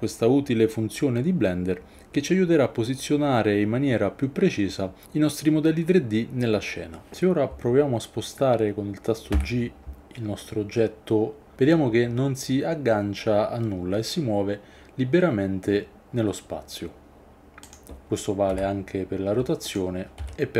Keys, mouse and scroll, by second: 9.3 g, 17.6 click, 18.5 r, 19.7 click, 20.2 s.